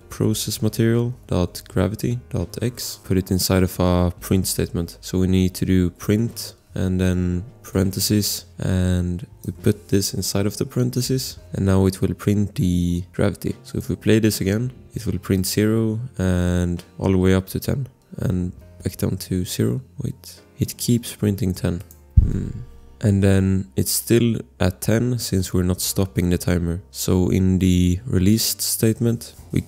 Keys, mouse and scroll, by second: 0.0-3.1 typing, 1.0 Return, 2.8 click, 3.1 click, 4.8-6.7 typing, 7.7 shift+8, 8.4 click, 8.5 click, 9.6 ctrl+c, 10.4 BackSpace, 11.0 Left, 11.3 ctrl+v, 11.3 ctrl+s, 13.6 click, 28.7 click, 29.3 Return.